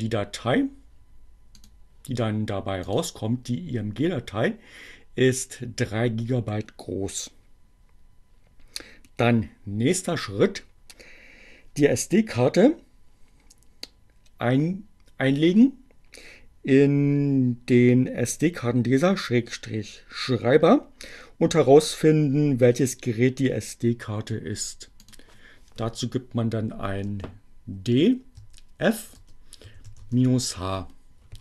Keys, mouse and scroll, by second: 1.3 click, 2.8 click, 25.0 click, 26.0 d, 27.8 f, 28.1 space, 29.2-30.1 typing.